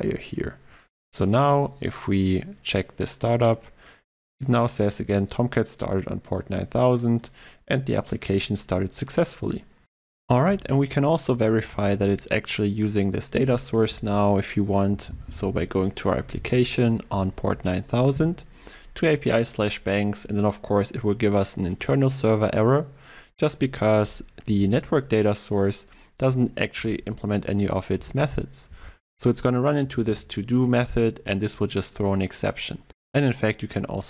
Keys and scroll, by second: 26.8 ctrl+e.